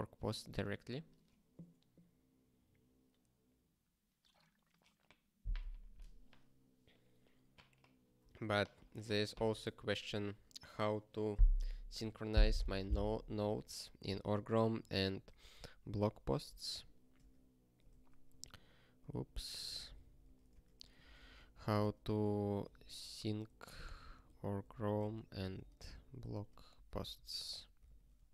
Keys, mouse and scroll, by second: 17.1 Return, 18.0 ctrl+=, 18.9 ctrl+/, 19.1 ctrl+g, 19.6 ctrl+p, 20.2 ctrl+e, 20.6 alt+Return, 20.7-27.9 typing, 27.9 ctrl+s, 28.2 ctrl+n.